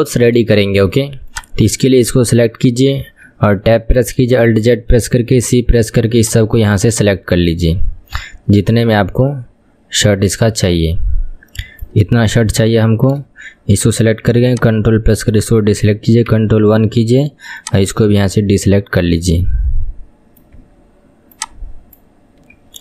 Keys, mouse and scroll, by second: 0.6-1.3 shift+middle drag, 1.3 click, 3.1 Tab, 4.5 alt+z, 5.4 c, 12.6 alt+z, 14.5 ctrl+click, 16.4 ctrl+KP_1, 17.6 ctrl+click, 18.4-21.4 middle drag, 21.4 ctrl+click.